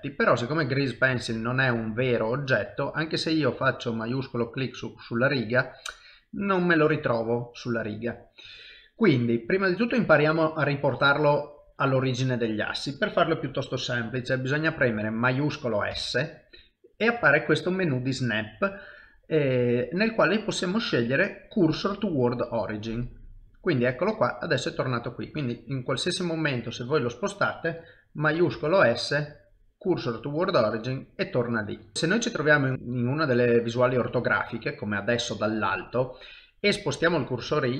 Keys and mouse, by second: 1.6 middle click, 4.3 shift+right click, 5.4 middle click, 7.3 middle click, 9.4 shift+middle click, 10.0 middle click, 11.2 middle click, 11.8 shift+middle click, 24.2 middle click, 25.4 shift+right click, 28.5 shift+s, 30.5 middle click, 32.7 ctrl+KP_7, 32.7 ctrl+middle click, 33.6 shift+middle click, 34.8 ctrl+middle click.